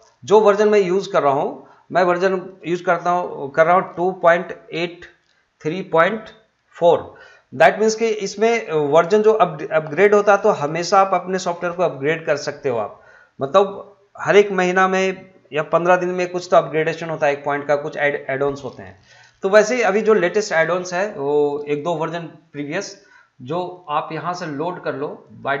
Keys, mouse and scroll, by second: 25.2 middle click, 25.2 click.